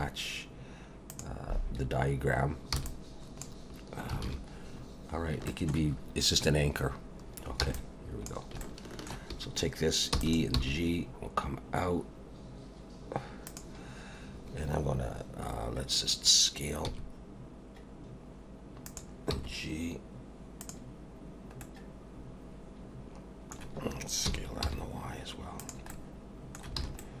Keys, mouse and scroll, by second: 2.8 b, 4.2 alt+a, 4.8-5.4 scroll up 1, 5.5 shift+middle click, 6.0-7.3 scroll down 1, 7.6 b, 8.6 shift+middle click, 10.1 e, 10.5 g, 16.9 s, 19.3 g, 21.6 middle click, 24.2 s, 25.9 middle click, 26.8 alt+a, 27.0 middle click.